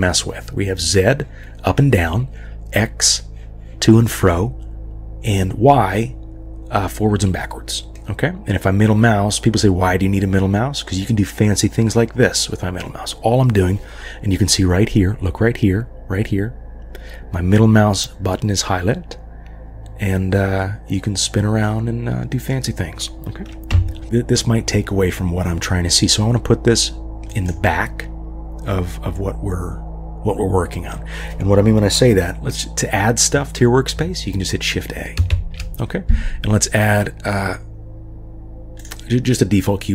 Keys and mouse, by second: 8.0-22.5 middle drag, 23.7 KP_1, 27.3 click, 35.3 shift+a.